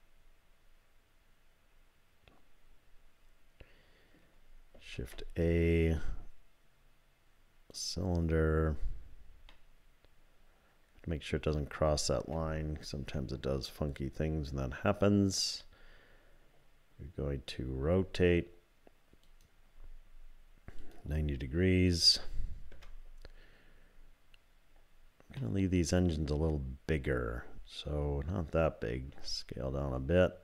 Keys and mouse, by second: 5.0 shift+a, 9.6-12.3 drag, 13.1 KP_3, 17.6 r, 20.9-23.6 drag, 25.4-27.9 middle drag, 29.1 s.